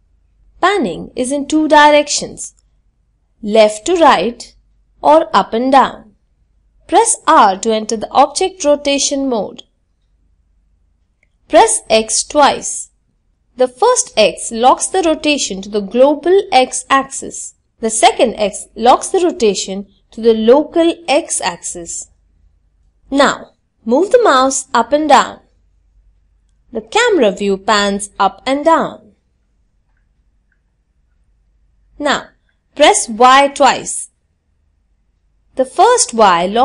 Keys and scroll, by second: 6.0 r, 6.0 x, 30.8 y.